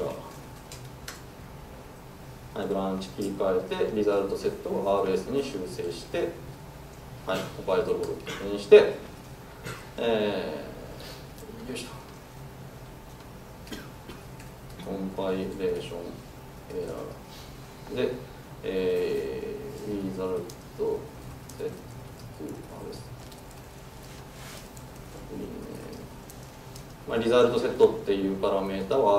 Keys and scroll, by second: 5.6 super+s, 28.8 super+s.